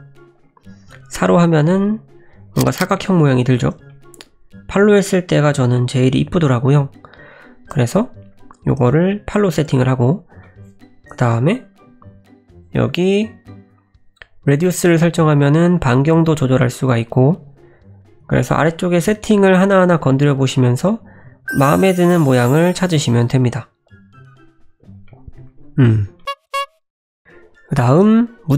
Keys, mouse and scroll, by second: 0.7 F9, 3.9 middle click, 6.4 F9, 10.4 scroll down 1, 10.4 middle click, 11.8 F9, 18.0 F9, 18.1 F9, 25.1 middle click, 26.2 middle click, 27.2 middle click, 27.2-27.9 scroll up 4, 27.9 middle click.